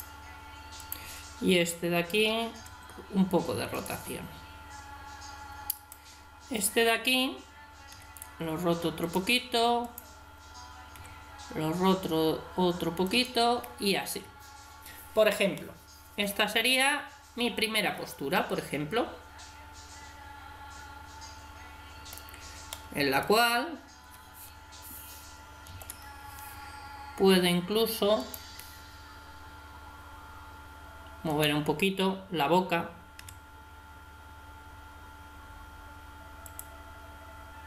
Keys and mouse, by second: 2.6 r, 7.4 click, 7.9 r, 9.5-11.0 drag, 10.9 r, 15.5-17.4 middle drag, 22.7-25.7 middle drag, 25.7 ctrl+KP_3, 29.1 right click, 31.3 right click, 33.2 r.